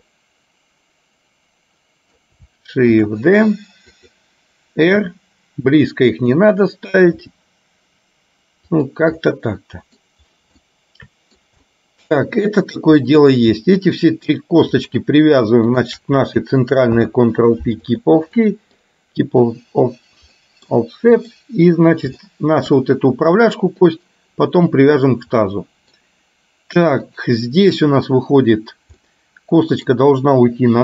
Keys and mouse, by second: 0.1-2.2 middle drag, 3.0 shift+d, 5.0 r, 7.2 g, 9.4 middle click, 10.6 shift+middle click, 11.7-12.9 middle drag, 14.0 shift+click, 17.0 ctrl+p, 18.5 middle click, 20.5 middle click, 21.2 click, 22.4 shift+middle click, 25.6 middle click, 29.1 middle click.